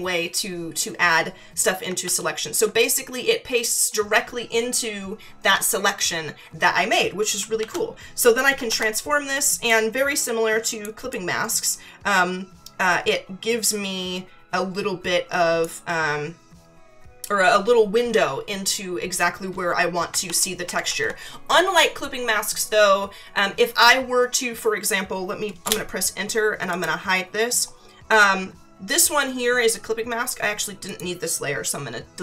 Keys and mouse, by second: 7.6 ctrl+t, 9.7 click, 11.1 click, 20.2 ctrl+-, 20.6 ctrl+=, 25.6 Return, 25.6 KP_Enter, 26.7 click, 30.9 click.